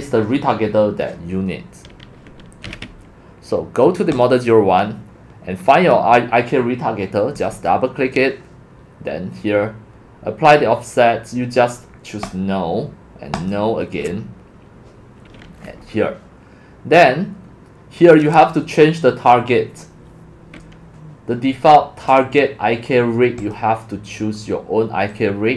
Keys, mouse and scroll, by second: 0.1 click, 4.1 click, 4.3-4.8 drag, 7.4 click, 12.4 click, 15.8-16.7 scroll, 23.4 click, 25.1-25.5 drag.